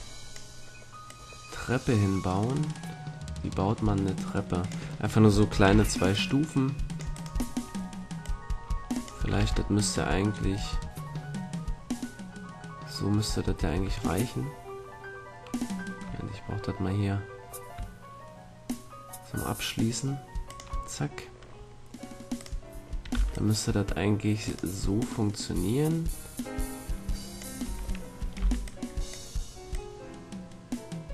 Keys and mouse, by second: 5.7 c, 7.2-11.5 drag, 8.2 right click, 9.3 shift+d, 21.5-24.3 drag, 22.5-24.3 right drag, 23.1 c, 24.5-26.5 right drag, 24.9-26.9 drag, 27.6 a, 28.3 b, 29.7-31.1 drag.